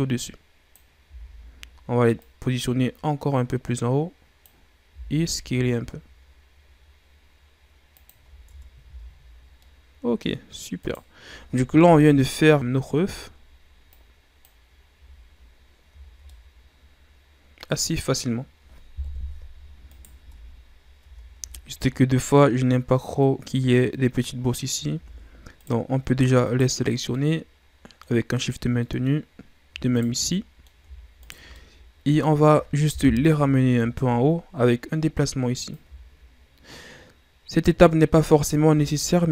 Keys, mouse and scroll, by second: 1.0 z, 2.1-4.9 drag, 4.9 s, 8.4 Tab, 8.8 a, 9.0-9.6 scroll down 5, 9.6-10.5 middle drag, 10.5-10.8 scroll up 1, 10.8 right click, 11.8 KP_1, 12.8-13.9 scroll down 3, 13.9-14.9 drag, 14.9 a, 16.0 scroll down 1, 16.2-18.3 middle drag, 18.3-19.0 scroll up 1, 19.0 KP_1, 19.9 right click, 20.1 Tab, 21.0 Tab, 21.6-21.9 shift+scroll down 2, 21.9-22.3 scroll up 1, 24.6-24.9 scroll up 2, 24.9 Tab, 25.6 right click, 26.4 shift+right click, 26.7-27.0 scroll down 4, 27.0-29.2 middle drag, 29.2-30.0 scroll up 1, 30.0 shift+right click, 30.3 middle click, 31.2 shift+right click, 31.5-32.9 middle drag, 32.9 KP_1, 34.2-35.7 scroll up 2, 35.7-38.7 drag, 38.7 Tab.